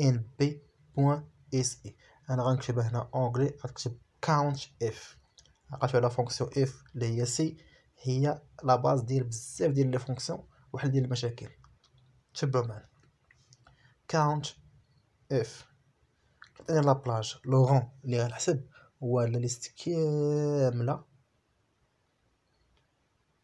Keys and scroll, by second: 3.2 ctrl+c, 4.5 ctrl+v, 6.7 shift+p, 7.1 Right, 8.2 Left, 8.7 shift+a, 8.9 Right, 9.5 a, 10.4 Right, 11.0 a, 11.1 Right, 11.7 a, 11.9 Right, 14.1 p, 14.7 Right, 15.9 Left, 21.8 shift+=, 22.7 BackSpace, 23.0 =.